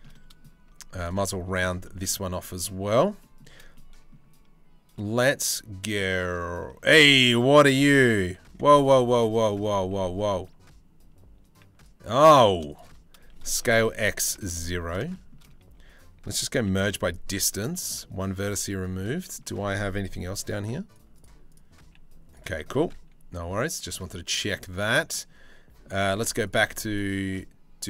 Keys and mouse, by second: 1.4 shift+middle click, 1.7 middle click, 2.9 shift+middle click, 3.3 middle click, 4.9 middle click, 6.4 shift+middle click, 8.0 1, 9.3 g, 13.1 s, 14.7 shift+middle click, 15.4 a, 16.2 m, 17.3 shift+middle click, 17.6 middle click, 19.9 g, 21.1 click, 21.4 g, 22.4 click, 24.1-25.5 middle drag, 25.6 2.